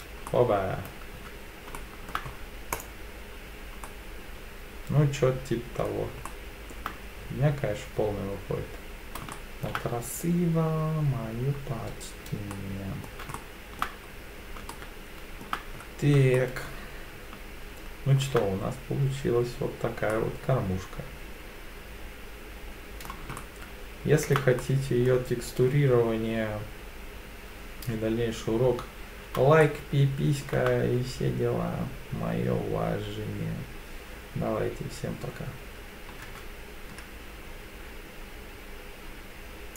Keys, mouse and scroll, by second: 0.3 middle click, 1.2 Tab, 1.8-2.1 shift+middle drag, 2.3 scroll up 2, 2.7-3.8 drag, 3.8-5.9 middle drag, 6.3-6.7 shift+middle drag, 9.3-9.6 shift+middle drag, 11.6-12.3 scroll down 1, 12.3 scroll down 2, 12.5-13.0 middle drag, 13.3-13.8 shift+middle drag, 14.1-14.6 scroll down 3, 14.7-15.4 shift+middle drag, 15.8-16.2 scroll up 2, 16.4-18.2 shift+middle drag, 18.8-19.5 scroll down 4, 20.1-23.1 middle drag, 23.4-24.3 shift+middle drag, 24.6 middle click, 29.6-30.4 shift+middle drag.